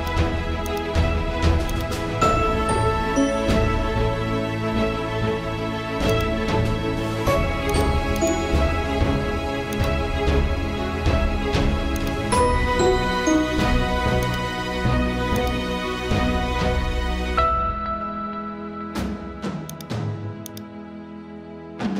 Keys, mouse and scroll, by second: 19.7 click, 21.7 z.